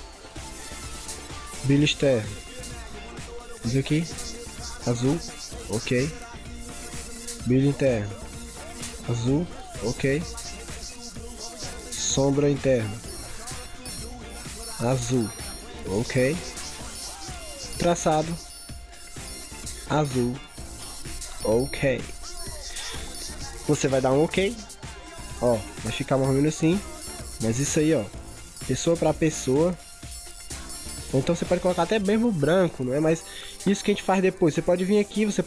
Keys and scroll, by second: 26.4 ctrl+=, 27.0 ctrl+0, 30.9 ctrl+z.